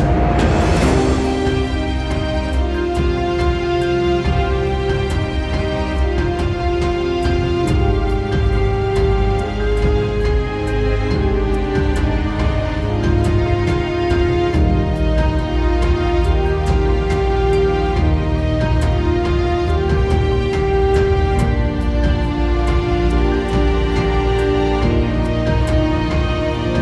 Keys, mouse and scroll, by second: 5.7 ctrl+z, 11.5 ctrl+z, 18.2 ctrl+z, 20.7 ctrl+z, 21.9 Return, 24.5 KP_0, 24.7 KP_3, 24.8 Return, 25.0 KP_5, 25.1 Return.